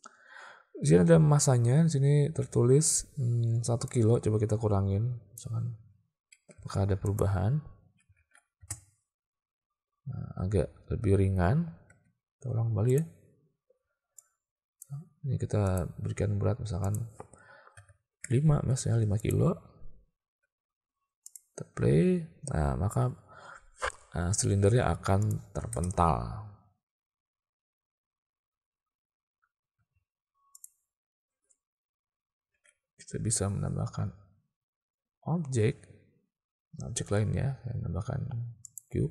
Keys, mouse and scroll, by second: 4.0-5.5 drag, 6.6 alt+a, 8.2 alt+a, 8.7 space, 11.9 space, 12.9 click, 14.2 click, 17.0-18.6 drag, 19.2 click, 21.3 click, 24.4 space, 25.3 click, 25.8 space, 29.8 space, 32.6 shift+a.